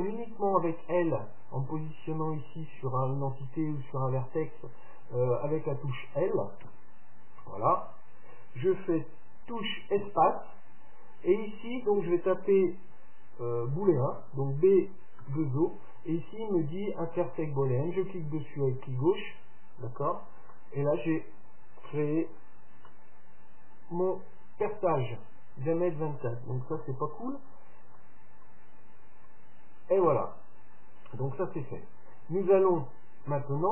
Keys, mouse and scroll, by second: 6.8 l, 10.1 space, 15.4 o, 20.6-22.5 middle drag, 22.4 Tab, 23.0-25.0 middle drag, 26.8 KP_7, 27.8-29.0 middle drag, 27.8-28.3 scroll up 1, 29.0-30.0 scroll up 1, 30.0-31.0 scroll up 1, 31.0-31.4 scroll down 1, 32.6 scroll down 1, 32.7-33.7 middle drag.